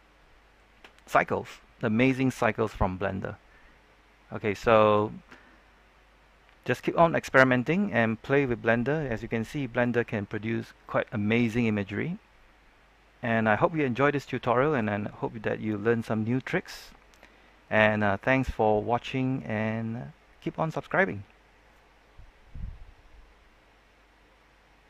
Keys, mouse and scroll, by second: 12.1-12.7 scroll down 1.